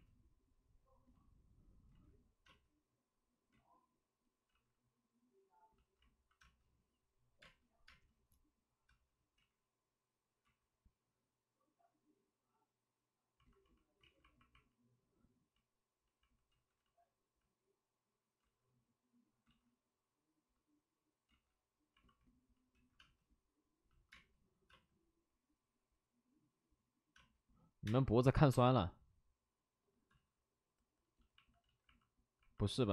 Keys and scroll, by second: 1.9 ctrl+z, 2.4 space, 3.5 ctrl+z, 6.4 space, 7.4 space, 9.3 ctrl+z, 9.3 space, 13.1 ctrl+z, 13.9 ctrl+z, 16.4 ctrl+z, 16.7 ctrl+z, 18.4 ctrl+z, 19.4 ctrl+z, 21.2 ctrl+z, 22.7 ctrl+z, 22.9 space, 24.1 space, 27.0 space, 27.1 space, 28.4 7, 28.4 space, 30.0 ctrl+z.